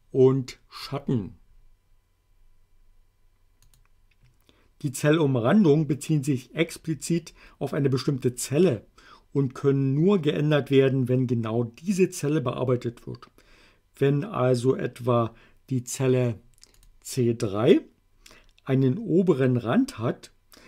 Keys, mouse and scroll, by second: 3.7 click, 16.8 click.